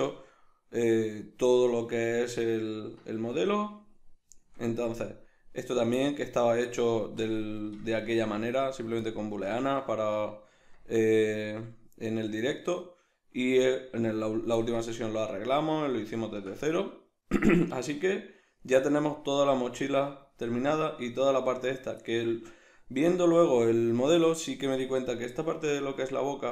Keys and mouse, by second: 5.7 right click, 6.0-7.2 middle drag, 7.2 drag, 7.8-10.6 middle drag, 8.0 Tab, 10.6 Tab, 11.4-26.5 shift+middle drag.